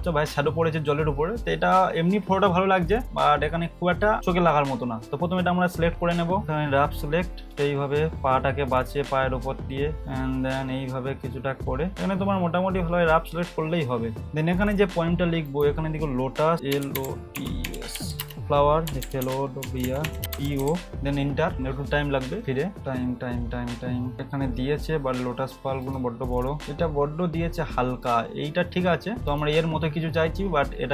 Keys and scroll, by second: 16.9-21.3 typing.